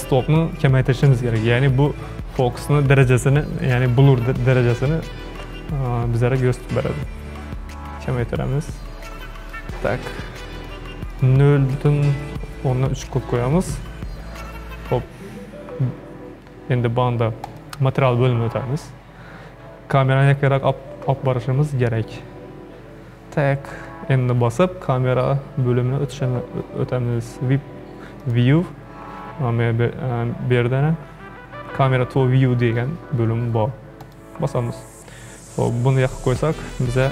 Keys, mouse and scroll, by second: 6.6-9.7 drag, 10.6-14.2 drag, 17.5 click, 22.0 n, 28.2 click, 34.0 click.